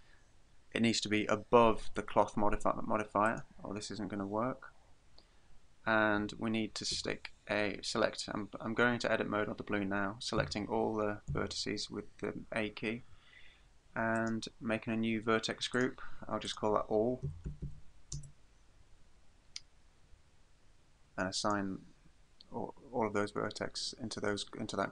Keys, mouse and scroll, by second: 3.3 click, 7.0 Tab, 10.4 a, 11.3 a, 14.2 click, 15.8 click, 16.5 click, 21.4 click.